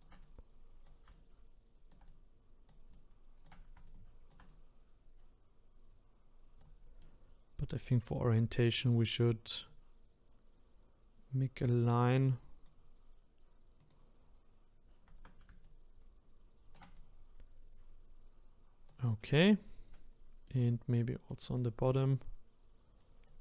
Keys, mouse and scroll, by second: 7.0-9.7 middle drag, 9.7-12.7 drag, 13.8 click, 15.6-20.5 shift+right drag, 20.5-23.2 middle drag, 23.2-23.4 right drag.